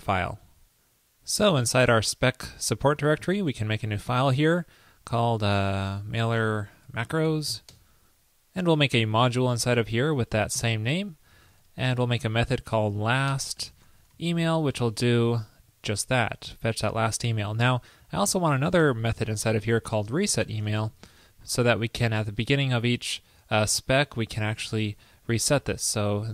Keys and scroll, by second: 14.9 super+v, 25.7 super+v.